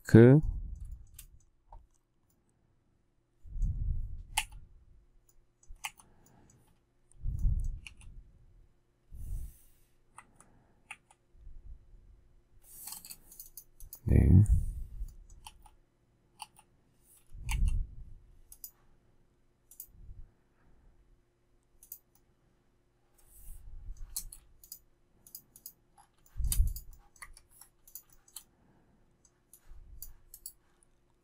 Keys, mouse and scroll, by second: 0.8 shift+middle click, 4.3 k, 7.8 q, 10.1 Right, 10.8 Left, 12.8 space, 15.4 k, 16.3 k, 17.4 q, 24.1 space, 26.2 shift+middle click, 27.1 Escape, 28.1 shift+middle click, 28.2 shift+double middle click.